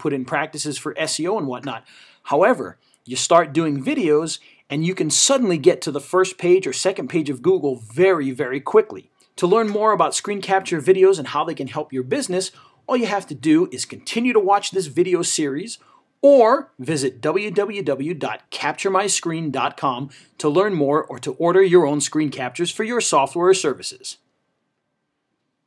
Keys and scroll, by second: 2.5 ctrl+v.